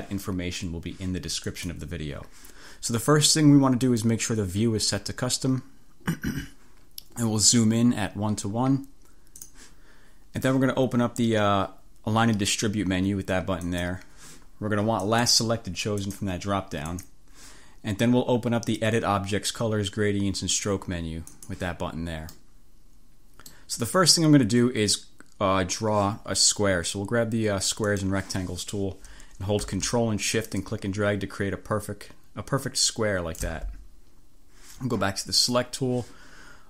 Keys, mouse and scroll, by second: 1.5 click, 3.9 click, 9.4 click, 13.7 click, 15.1 click, 16.1 click, 16.9 click, 21.3 click, 22.4-23.8 drag, 27.9 click, 30.7-33.8 drag, 35.5 click.